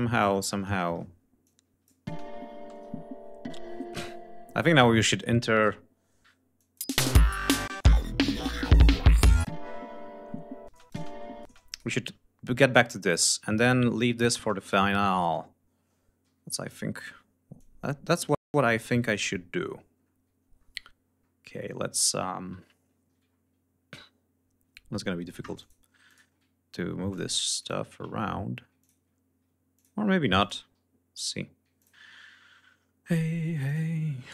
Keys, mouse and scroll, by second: 0.0-0.7 scroll up 4, 1.4 click, 2.1 space, 2.7 ctrl+s, 3.1-3.9 ctrl+scroll down 5, 3.9 space, 4.4-4.7 scroll up 2, 6.5 click, 6.7 space, 7.7 space, 7.7 click, 9.3 click, 10.7 space, 10.7 click, 11.7 click, 12.8-13.3 scroll up 2, 13.6-13.9 scroll down 2, 14.6 g, 15.0 scroll down 2, 15.4 ctrl+scroll up 2, 16.2 ctrl+r, 17.5-19.2 drag, 19.5-20.1 scroll down 2, 20.2-20.6 scroll down 1, 20.9-21.8 scroll up 4, 23.1 ctrl+scroll up 2, 25.5 ctrl+click, 25.9 ctrl+click, 26.3 ctrl+scroll up 2, 27.0 ctrl+click, 27.5 ctrl+click, 28.1 ctrl+scroll up 2, 28.7 ctrl+click, 29.6 ctrl+click, 30.3 ctrl+click, 30.5 ctrl+scroll up 2, 31.7 ctrl+click, 31.9 ctrl+scroll up 2, 32.6 scroll down 2, 33.5 ctrl+click.